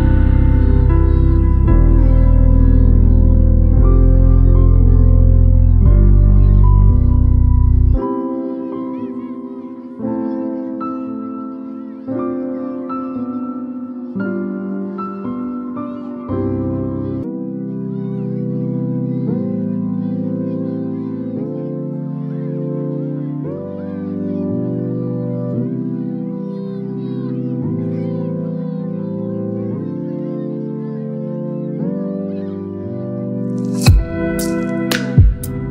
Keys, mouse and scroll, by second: 1.3 x, 7.6 Escape, 9.2 click, 12.5 click, 15.2 alt+BackSpace, 16.4 ctrl+d, 18.7 v, 19.8-20.5 alt+scroll down 3, 20.7 space, 21.1-21.5 click, 22.0-22.7 alt+scroll down 2, 23.1 space, 23.2-23.8 drag.